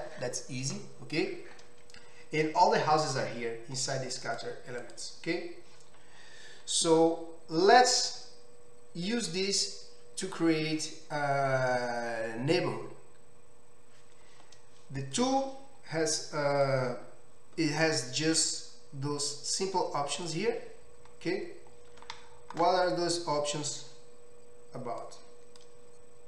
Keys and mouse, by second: 4.2 click, 4.4-16.6 middle drag, 16.6 click, 16.7-20.3 middle drag, 20.3 click, 20.4-25.1 middle drag, 25.1-26.2 drag.